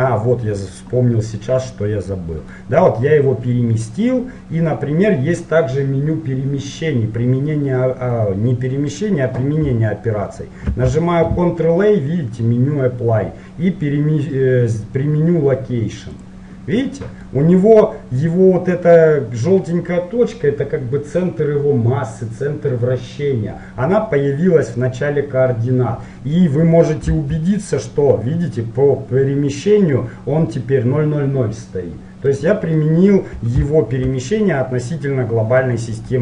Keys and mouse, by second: 2.2-4.0 middle drag, 10.9 ctrl+a, 16.9-27.1 middle drag, 27.1 n, 32.4-35.7 middle drag, 35.7-36.2 middle drag.